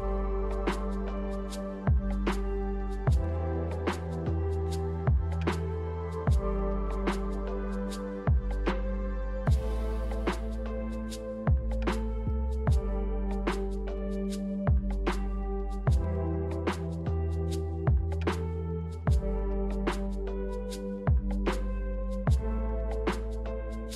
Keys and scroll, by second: 3.2-4.1 typing, 14.6 ctrl+z, 20.1-21.5 typing, 23.0 a.